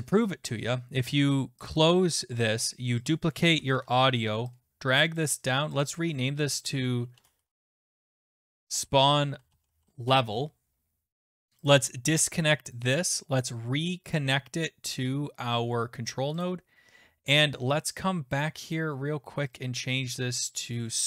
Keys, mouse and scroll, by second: 1.7 click, 3.1 click, 3.7 ctrl+d, 5.2 shift+click, 5.8 click, 6.0 click, 6.9-10.1 typing, 11.6 Return, 11.6 BackSpace, 11.7 click, 11.9 right click, 12.8 click, 13.4 right click, 14.2 click, 16.4 click, 18.0 click, 18.4 click, 18.7 click, 19.6 click, 20.8 click.